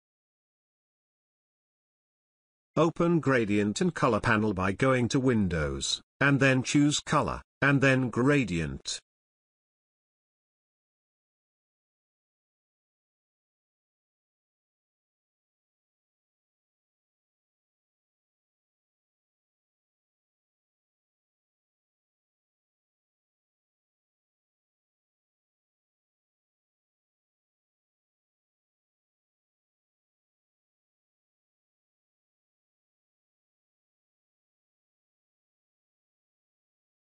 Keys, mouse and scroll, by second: 6.5 click, 11.0-11.9 drag, 20.4-24.0 drag.